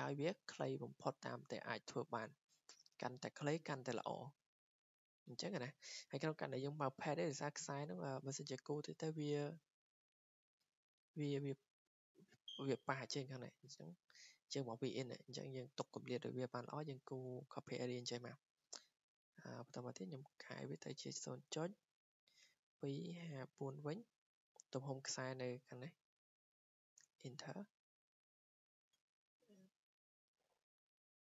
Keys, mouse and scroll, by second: 5.8 click, 6.3-10.8 drag, 12.9-13.6 scroll up 2, 13.6 scroll down 2, 15.3 scroll up 2, 15.9 scroll, 19.3 click, 20.3-20.7 typing, 22.1-24.1 typing, 23.1-24.5 drag, 27.0 Return, 28.5-29.6 drag.